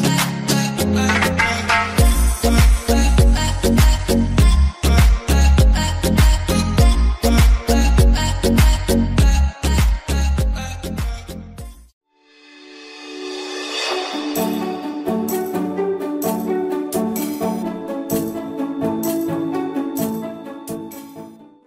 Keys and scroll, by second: 0.3 Delete.